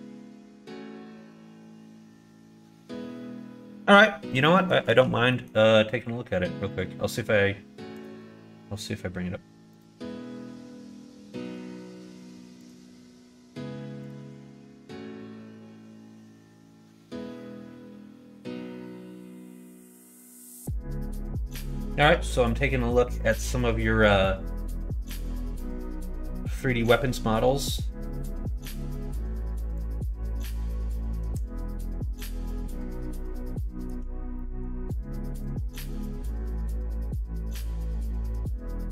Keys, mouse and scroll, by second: 0.0 shift+middle click, 1.2 shift+middle click, 2.9 shift+middle click, 4.5 shift+middle click, 5.3 middle click.